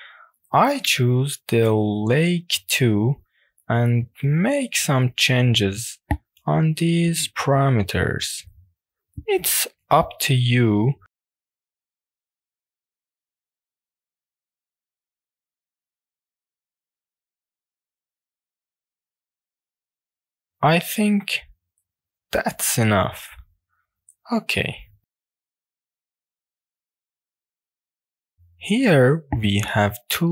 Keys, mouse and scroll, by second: 0.2-1.5 drag, 1.7-2.4 scroll up 3, 2.1-2.8 middle drag, 3.4-4.0 shift+middle drag, 4.2 middle click, 4.7-5.7 scroll down 2, 5.9-6.3 scroll down 2, 6.3-7.0 scroll up 4, 7.0 scroll down 1, 8.1-9.0 scroll down 3, 9.0 click, 9.0 scroll down 1, 9.4 click, 9.8 drag, 10.9 click, 11.3 click, 12.4-15.4 drag, 15.6 click, 16.7-18.7 drag, 19.5 click, 20.8-22.0 middle drag, 23.5 click, 24.0 click, 24.4-25.3 middle drag, 25.5 shift+middle click, 26.2 click, 26.4-26.7 scroll down 3, 26.7 click, 26.9-27.3 scroll up 3, 27.3 click, 27.6-28.1 scroll down 2, 28.6 click, 29.1 click, 29.9-30.3 middle drag.